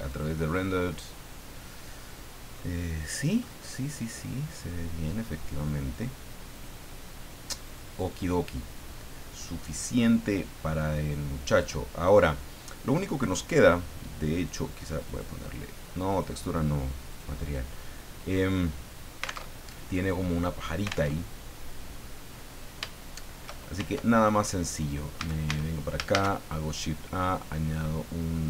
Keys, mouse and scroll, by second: 0.1 click, 2.2 middle click, 2.9 middle click, 4.1 middle click, 6.5 click, 7.6 click, 8.9-9.2 scroll up 1, 9.4-11.1 middle drag, 11.1 scroll up 1, 11.8 scroll down 1, 14.3 click, 15.0 click, 16.1 click, 17.1 click, 17.8-19.4 drag, 19.4 alt+Tab, 21.0 alt+Tab, 23.8 shift+Tab, 24.6-25.0 scroll down 2, 25.2 a, 26.1 shift+a.